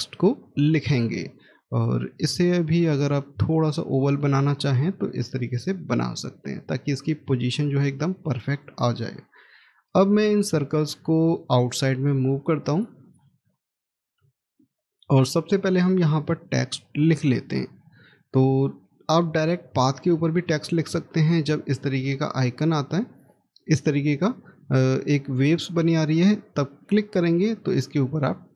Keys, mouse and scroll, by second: 2.4 scroll up 1, 4.0 shift+click, 6.5 scroll down 1, 14.4 middle click, 21.1-24.1 scroll up 1.